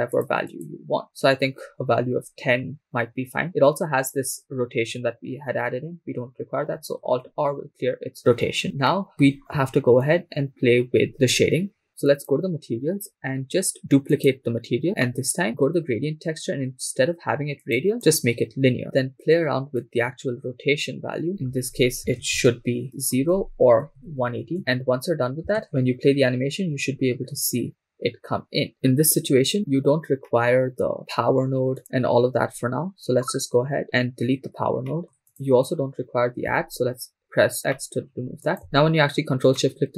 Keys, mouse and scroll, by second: 0.1 click, 0.5 click, 7.1 alt+r, 8.6 scroll up 4, 8.9 shift+middle click, 10.1 shift+middle click, 10.1-10.8 scroll up 1, 12.1 click, 14.1 click, 15.4 middle click, 16.4 scroll up 3, 18.4 click, 19.8-22.5 drag, 23.0-24.5 drag, 24.7-25.4 scroll down 2, 25.4 scroll down 1, 25.6-30.2 drag, 25.6 shift+space, 30.2 middle click, 31.0 scroll up 2, 31.8 click, 33.8 x, 34.9-35.3 middle drag, 35.3-36.7 drag, 37.5 x, 37.7 middle click, 38.5 click, 38.7 ctrl+shift+click, 39.5 middle click.